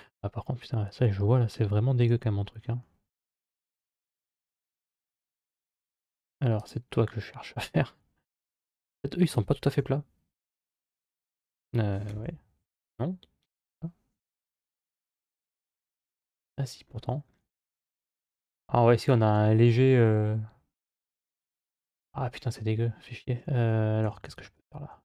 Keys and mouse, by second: 1.8 Tab, 2.6-5.0 middle drag, 7.0-8.8 middle drag, 9.6 KP_3, 10.5 KP_1, 11.9 KP_7, 12.0 KP_7, 12.6 KP_3, 14.6 KP_Divide, 21.6 middle click, 24.4 alt+right click.